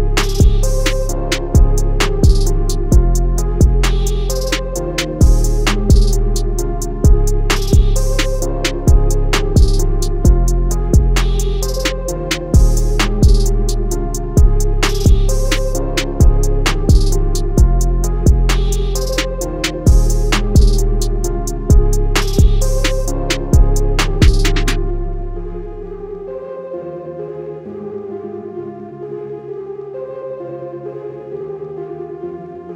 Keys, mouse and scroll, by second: 0.6 click, 1.2 alt+scroll up 1, 1.5 scroll down 1, 2.4 click, 2.7 scroll up 1, 3.4 click, 10.2 scroll down 1, 10.9 click, 19.5 click, 20.6 click, 25.5 scroll down 1, 25.8 scroll up 1, 26.2 click.